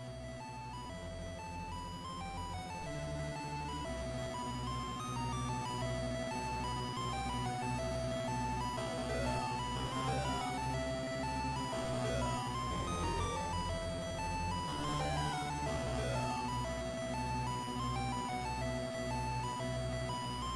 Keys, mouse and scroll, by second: 14.3-14.6 scroll down 1, 16.5 click, 16.5-17.5 scroll down 3, 17.5 click.